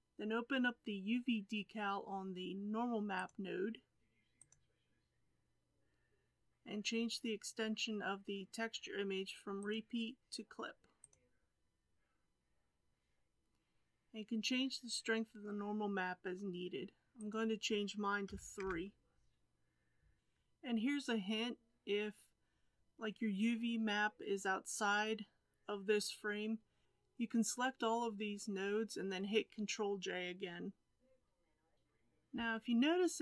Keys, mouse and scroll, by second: 4.5-31.7 drag, 31.7-33.2 middle drag.